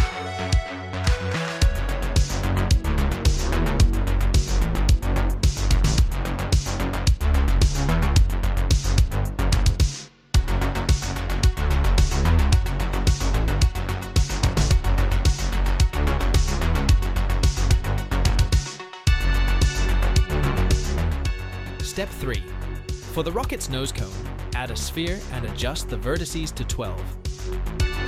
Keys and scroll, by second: 1.0 ctrl+b, 1.0 ctrl+v, 1.1 ctrl+r, 1.3 ctrl+b, 4.9 2, 6.9 ctrl+b, 9.0 e, 9.6 alt+s, 12.0 s, 14.0 s, 14.2 z, 17.3 Tab, 19.4 Tab, 20.2 3, 21.0 shift+s, 21.6 x, 22.7 Tab, 23.3 shift+a.